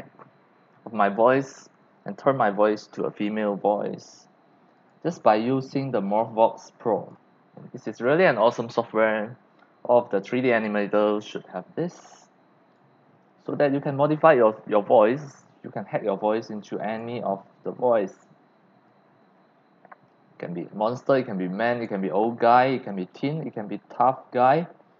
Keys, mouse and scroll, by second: 4.8 click, 5.1 click, 6.6-7.1 drag, 12.0-12.7 drag, 16.6-17.0 drag, 18.9-21.8 drag, 24.0 click.